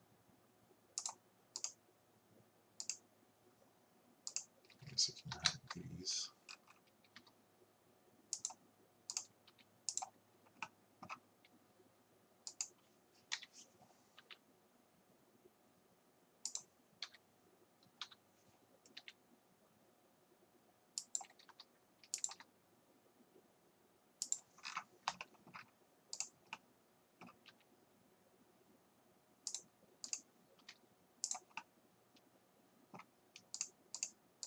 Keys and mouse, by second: 1.6-5.7 drag, 5.4 n, 5.7 t, 7.2 r, 9.5 r, 13.4 KP_7, 14.2 g, 17.1 KP_1, 18.1 KP_3, 19.0 g, 21.5 r, 24.8 middle click, 24.9 right click, 25.1 middle click, 25.3 middle click, 26.4-27.5 right drag, 27.5-31.7 drag, 27.5 g, 31.7 right click, 33.6 click.